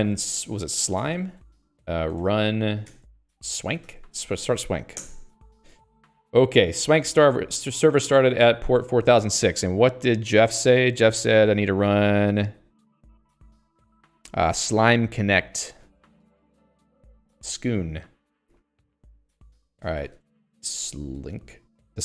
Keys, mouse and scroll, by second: 9.4 Escape, 16.3 alt+x, 16.4-21.6 typing.